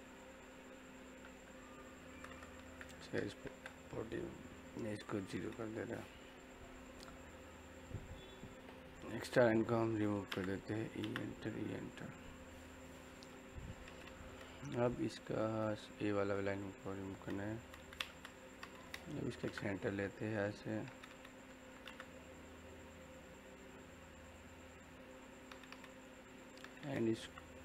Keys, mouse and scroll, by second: 5.1 click, 5.8 middle click, 8.6 click, 10.1 e, 10.2 space, 10.6 click, 10.9 space, 11.3-15.4 middle drag, 15.4 scroll up 1, 16.2 click, 16.9-17.6 scroll down 1, 17.3-19.4 typing, 18.3 click, 20.4 click, 21.6 l, 21.8 space, 24.2 click, 26.0 middle click, 27.2 o.